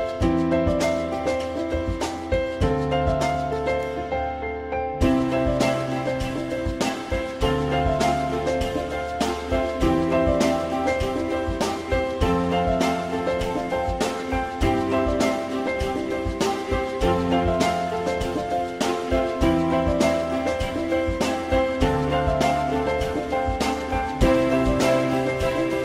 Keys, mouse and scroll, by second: 0.9 alt+x, 1.1 alt+middle click, 14.6 ctrl+click, 21.3 ctrl+z, 24.5 alt+middle click.